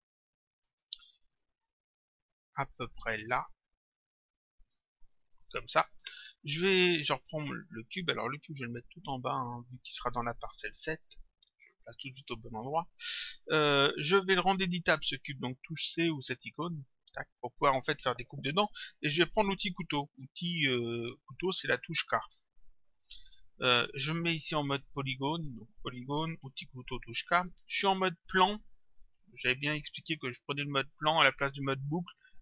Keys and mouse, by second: 1.7 click, 4.4 click, 7.6 click, 11.6 click, 12.7 click, 14.5 click, 16.8 click, 22.4 k, 24.8 click, 26.4 k, 28.5 click.